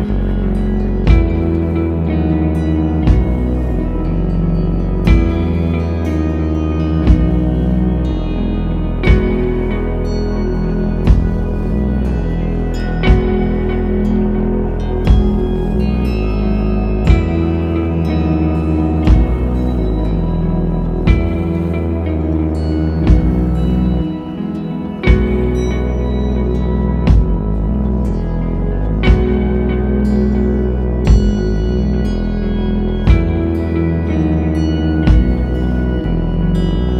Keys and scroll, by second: 6.8 super+z, 13.1 t, 14.9 space, 32.9 super+z.